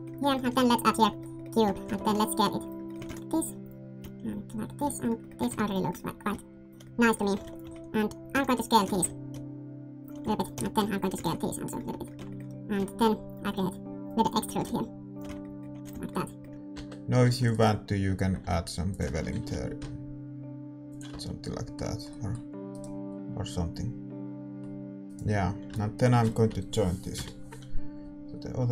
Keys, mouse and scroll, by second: 0.9 shift+a, 1.6 Tab, 1.8 s, 2.7-3.9 middle drag, 2.9 s, 3.9-5.3 drag, 4.8-6.2 middle drag, 5.3 s, 6.2-7.3 drag, 7.3-9.0 typing, 7.5-10.0 right drag, 10.1-13.3 middle drag, 10.2-11.8 typing, 10.3-11.6 right drag, 12.1 Tab, 12.7 Tab, 13.3-15.0 drag, 14.0-15.2 right drag, 14.5 e, 15.2 Tab, 15.7 a, 15.9 ctrl+s, 16.3-17.4 middle drag, 16.5 Tab, 16.5 s, 16.7 Tab, 16.7 ctrl+r, 17.2 ctrl+r, 18.3 s, 19.3 ctrl+b, 21.1 Tab, 21.1 middle click, 22.7-24.6 middle drag, 22.7-24.6 right drag, 25.0-28.3 middle drag, 25.0-28.3 right drag, 28.3 ctrl+j.